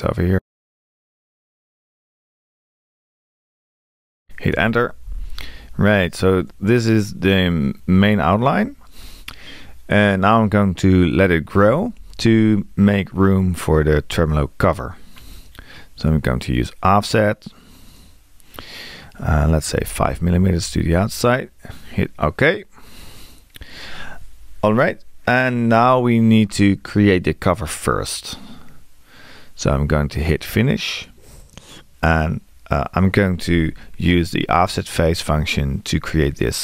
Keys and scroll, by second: 4.5 Return, 19.8 5.